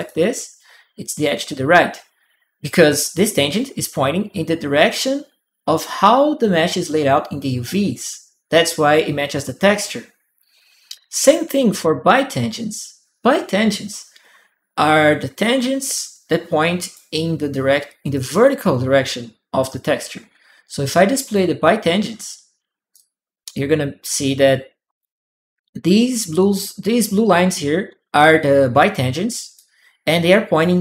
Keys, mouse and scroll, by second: 15.2-17.9 drag, 15.8 right click, 21.0 click, 22.7-23.9 drag, 22.9 right click, 29.3 click, 29.4 right click.